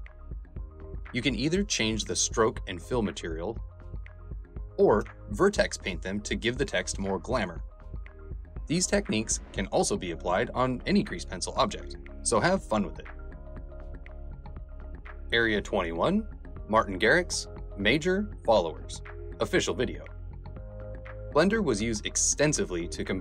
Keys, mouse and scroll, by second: 1.3 click, 2.0 click, 2.4 f, 2.6 f, 2.7 click, 3.0 click, 3.6 click, 3.9 click, 4.1 click, 4.4 ctrl+s, 4.6 click, 4.7 f, 4.8 click, 5.3 click, 5.9 v, 6.0 click, 6.6 v, 6.7 f, 6.9 click, 7.2 ctrl+z, 7.3 click, 7.5 ctrl+z, 8.3 click, 8.6 click, 9.0 ctrl+z, 9.0 click, 9.3 click.